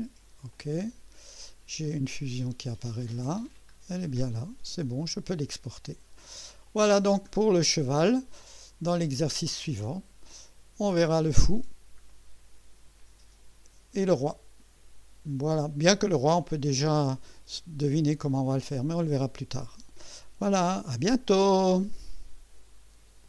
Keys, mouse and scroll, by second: 0.5 click, 1.1 scroll down 1, 2.6 click, 3.0 space, 3.7 scroll up 1, 4.3 right click, 6.7 click, 7.3 scroll down 1, 7.9 scroll down 1, 8.5 right click, 9.9 scroll down 1, 10.3-11.1 right drag, 12.1-14.2 right drag.